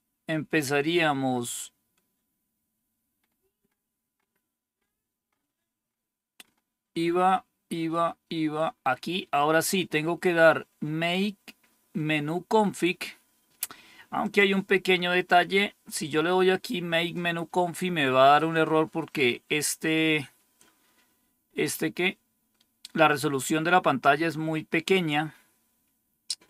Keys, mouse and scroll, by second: 1.4-3.1 scroll down 2, 3.1-6.3 scroll down 1, 6.3-7.0 scroll down 1, 7.0-8.2 scroll down 1, 8.2-9.1 scroll down 1, 9.1-14.1 scroll down 1, 14.1 click.